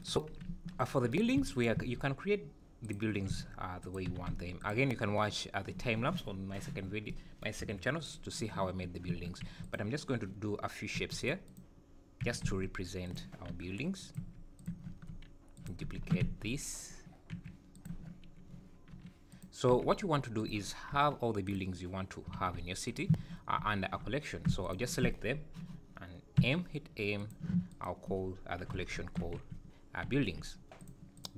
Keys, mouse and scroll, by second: 0.5 `, 1.6 shift+right click, 1.8 shift+a, 3.3 s, 4.1 g, 7.6 KP_Decimal, 8.0-8.7 scroll down 6, 8.7 `, 9.1 Tab, 9.5 4, 9.7 click, 10.1-10.6 scroll down 2, 11.0 3, 11.2 click, 11.5 click, 12.2 g, 13.5 i, 14.2 e, 14.7 Tab, 15.6 shift+click, 16.0 shift+d, 17.9 Tab, 18.9 i, 19.7 e, 21.0 i, 22.4 alt+s, 23.1 Tab, 24.6 shift+click, 26.4 m.